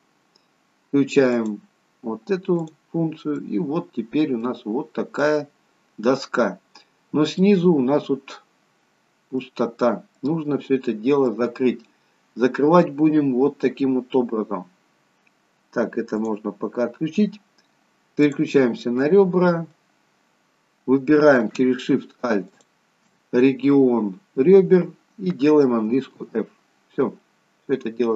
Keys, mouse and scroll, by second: 1.5 click, 3.4 middle click, 4.9-5.3 scroll down 1, 5.3 middle click, 7.8 middle click, 9.8 scroll up 1, 10.1 middle click, 10.7-11.2 scroll down 2, 11.2 middle click, 16.2 click, 19.0 middle click, 19.9-21.2 scroll up 1, 21.2-21.8 scroll up 2, 22.4 alt+shift+click, 26.1 f, 26.6-28.1 scroll down 2, 27.1 middle click.